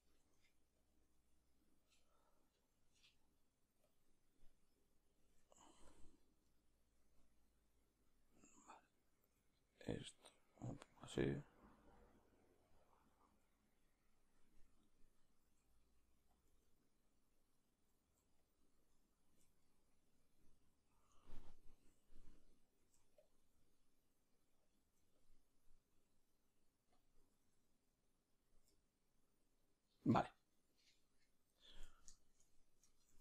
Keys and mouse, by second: 0.2 g, 6.0 q, 6.5-9.3 right drag, 9.3 r, 10.1 g, 10.8 r, 16.5 g, 18.9 right click, 19.3 g, 22.9 middle click, 23.4 r, 24.8 g, 25.9 r, 28.5 g, 32.2-33.2 shift+middle drag, 33.1 shift+d.